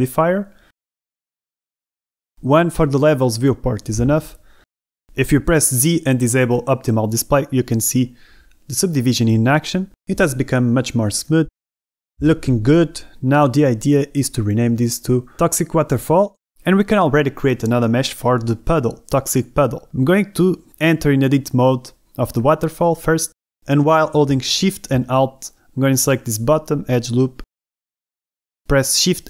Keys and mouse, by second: 0.3-4.7 drag, 6.5 z, 7.8 click, 8.8 click, 8.8-12.1 middle drag, 14.7 l, 16.6 z, 18.8 shift+drag, 19.0 Tab, 21.5 a.